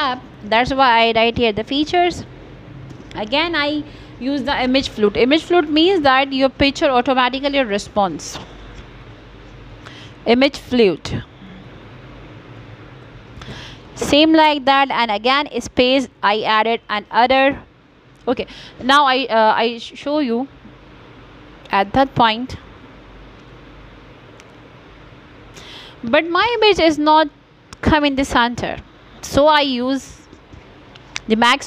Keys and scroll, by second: 0.8-3.3 typing, 23.9 space, 27.4 r, 29.7 d.